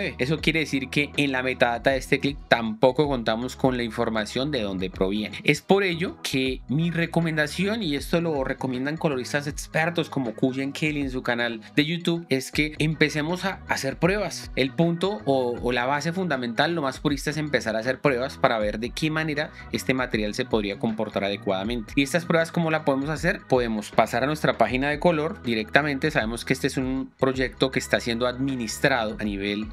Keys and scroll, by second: 25.6 shift+6, 27.8 shift+6.